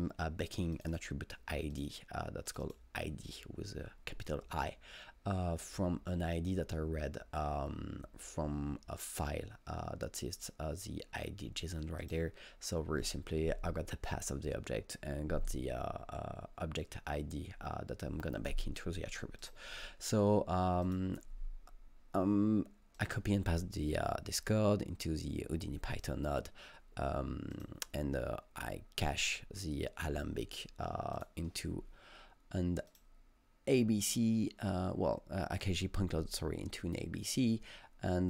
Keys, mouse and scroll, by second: 0.8 click, 2.5 double click, 2.6 double click, 12.0 click, 19.4 click, 20.9 click, 23.0 click, 27.6 click, 31.2-35.5 click.